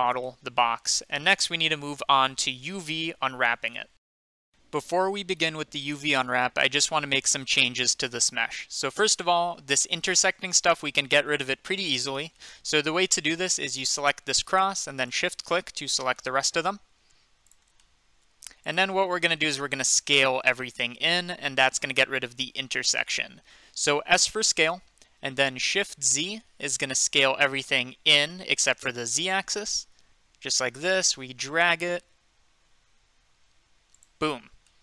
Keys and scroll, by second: 24.4 s, 28.2 z.